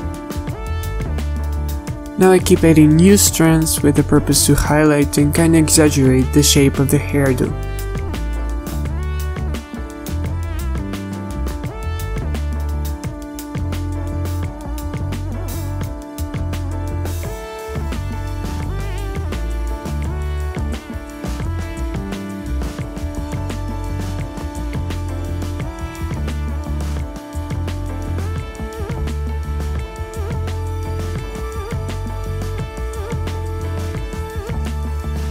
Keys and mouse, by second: 0.8 z, 3.5 click, 3.9 click, 4.2 click, 4.4 ;, 4.7 z, 4.9 l, 5.3 z, 7.3 a, 8.8 middle click, 9.0-11.7 typing, 9.3 click, 10.4 click, 12.9 z, 13.5 z, 16.1 z, 16.2 z, 16.6 f, 16.9 ctrl+z, 19.7 ctrl+z, 20.5 ctrl+z, 21.1-23.0 typing, 24.4-25.9 typing, 27.3 l, 27.4 z, 29.0 l, 30.1 drag, 30.5 click, 31.3 drag, 32.0 click, 32.9 click, 33.3 a, 33.7-35.3 drag.